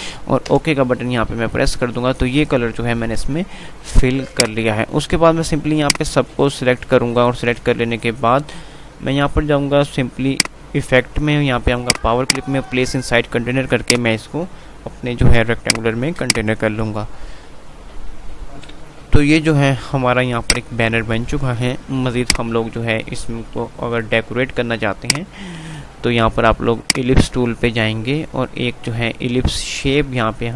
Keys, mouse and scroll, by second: 0.8 Return, 3.0 F3, 4.5 click, 4.7 click, 5.7-10.0 drag, 10.5 click, 18.8 p, 20.3 click, 21.7 F2, 25.1 click, 25.7 F3, 27.0-30.5 drag.